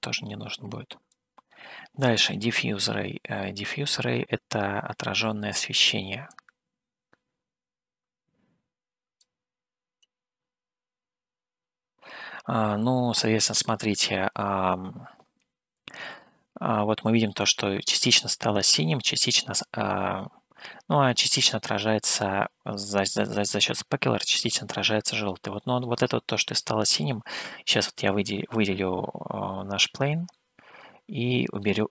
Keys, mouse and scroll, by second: 0.0-1.3 drag, 2.8-4.1 middle drag, 6.6-9.6 drag, 21.0-22.5 middle drag, 25.1 middle click, 29.0 click, 30.5-31.9 middle drag.